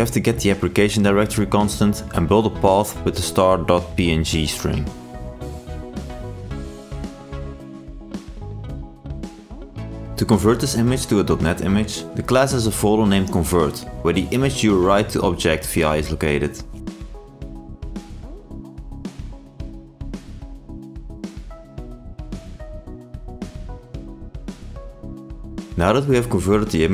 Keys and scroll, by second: 16.5 ctrl+space, 17.5 ctrl+i.